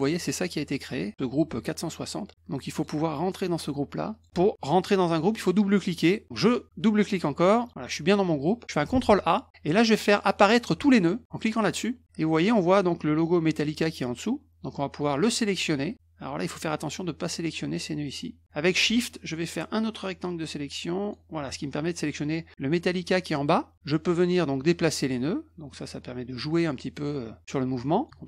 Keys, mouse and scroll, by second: 2.7 click, 3.2 click, 4.1 click, 7.4 click, 7.6 click, 8.9 ctrl+a, 11.5 click, 15.1-16.6 drag, 19.1-21.1 shift+drag, 24.7-28.0 drag, 28.1 ctrl+z.